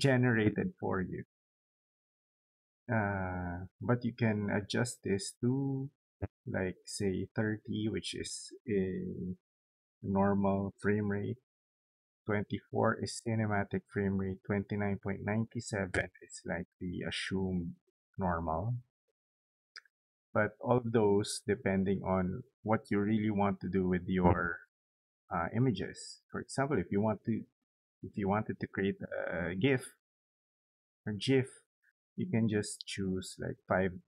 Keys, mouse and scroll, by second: 3.2 click.